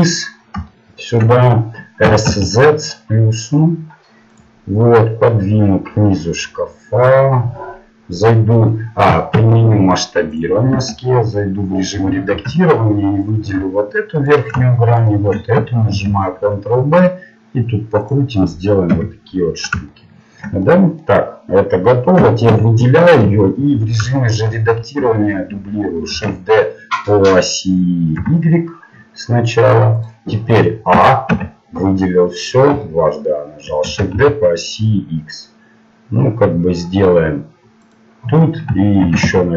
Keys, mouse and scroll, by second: 2.1 s, 5.0-7.4 drag, 10.4 ctrl+a, 10.7 Tab, 13.3 ctrl+Tab, 14.3-16.6 right drag, 15.9 ctrl+b, 18.9 KP_7, 22.1 a, 22.5 a, 23.3 KP_7, 26.1 shift+d, 30.9 a, 31.3 a, 32.4-33.7 middle drag, 33.8 shift+d, 39.0 shift+d.